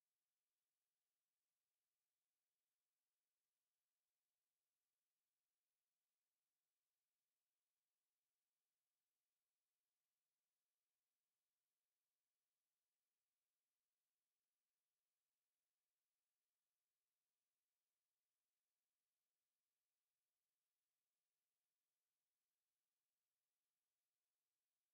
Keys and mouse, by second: 2.7 KP_3, 7.0 s, 10.9-13.7 middle drag, 12.9 s, 19.2-20.7 drag, 20.5 middle click, 20.7 middle drag, 20.8 drag, 20.9-22.3 middle drag, 22.3-24.4 drag.